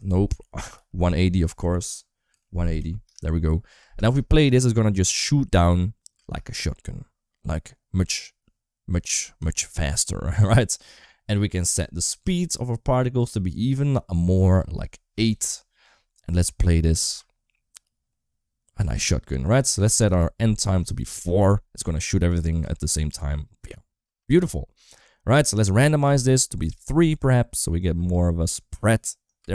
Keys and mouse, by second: 0.1 ctrl+z, 0.7 r, 3.7 space, 6.1 space, 8.8-9.1 middle drag, 9.3 shift+middle click, 9.8-12.0 middle drag, 12.0 click, 14.4 click, 16.9 space, 18.7 space, 19.9-21.0 drag, 22.5 space, 23.9 space, 25.7 click, 27.7 click, 27.9 space, 29.3 space.